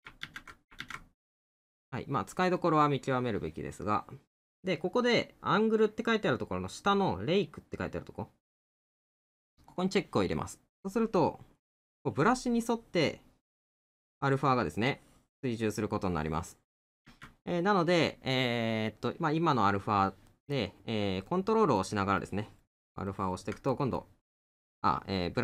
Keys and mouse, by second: 2.6 middle click, 20.3 middle click, 23.7 middle click.